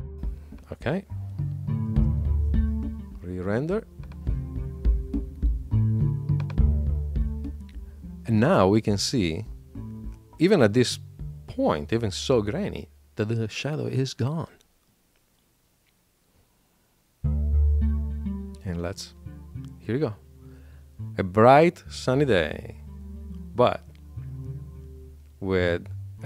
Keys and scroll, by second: 1.8 shift+super+l.